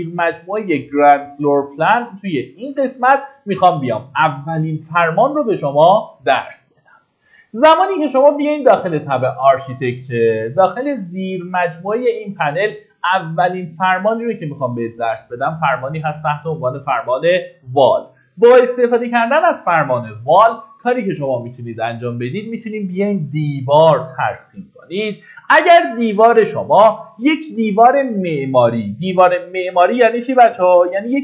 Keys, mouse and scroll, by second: 3.5 middle click, 20.1-31.2 drag.